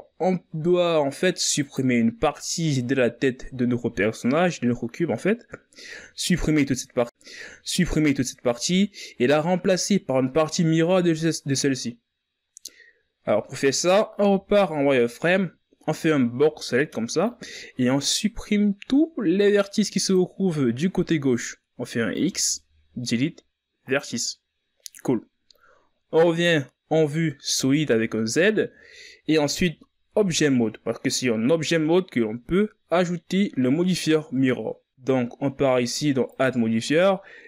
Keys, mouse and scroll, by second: 0.6 z, 1.6 right click, 3.9 right click, 5.5-5.8 shift+scroll up 4, 15.2 z, 17.2 b, 23.0 x, 28.3 z, 29.4-30.9 ctrl+scroll up 3, 30.9 Tab, 37.1-37.4 drag.